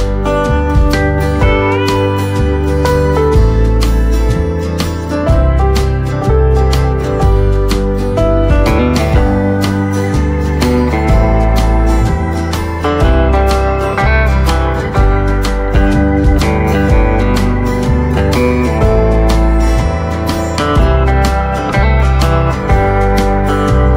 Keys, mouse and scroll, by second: 0.9 shift+right click, 2.2 click, 2.6-3.1 scroll up 1, 3.1-7.7 drag, 8.1 scroll down 1, 9.5-13.2 drag, 9.5 typing, 13.2 scroll down 1, 13.5 right click, 13.6 right click, 14.0 scroll up 1, 14.3-17.3 drag, 17.3 right click, 18.1-20.8 drag, 21.2-21.6 scroll down 1, 21.6 right click, 23.6 scroll up 1.